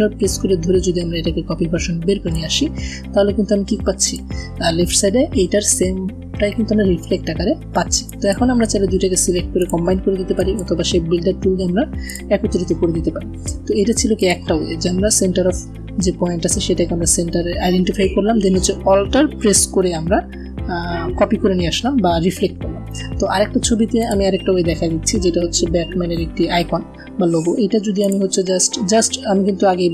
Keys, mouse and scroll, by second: 0.1-2.3 alt+drag, 3.5 v, 3.8 click, 8.0 click, 11.0 a, 11.8 click, 23.9 click, 25.5 p, 27.9 click.